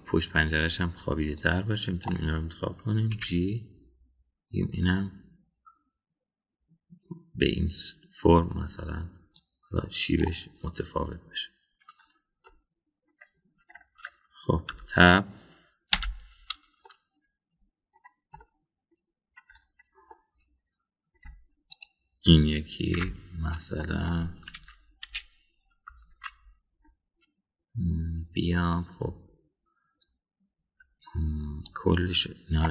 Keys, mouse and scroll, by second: 0.6 KP_3, 2.3-3.1 drag, 4.1 g, 13.4-14.1 middle drag, 15.7 Tab, 17.0 /, 17.8-18.9 middle drag, 19.4-20.0 middle drag, 21.1-22.1 middle drag, 22.7 click, 24.0 /, 24.8 middle click, 25.5 KP_1, 26.0 KP_3, 27.2 Tab, 32.6-32.7 drag.